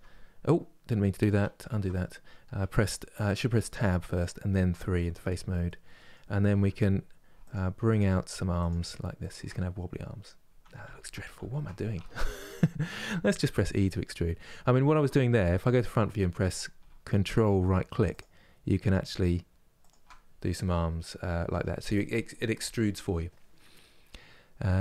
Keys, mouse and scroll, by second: 1.4 ctrl+z, 3.4 Tab, 3.9 click, 4.6-7.2 middle drag, 7.2 ctrl+Right, 7.6 ctrl+Right, 9.5 scroll down 1, 9.9 middle click, 10.5 ctrl+z, 10.8 ctrl+z, 12.0-15.5 middle drag, 15.5 KP_1, 17.8 ctrl+Right, 18.8 ctrl+Right, 20.0-24.8 middle drag.